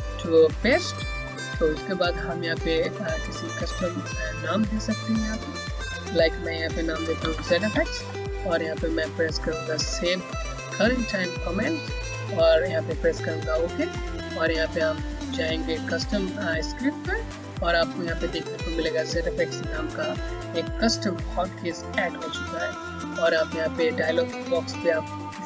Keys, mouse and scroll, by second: 3.0 click, 6.8-8.0 typing, 11.5 click.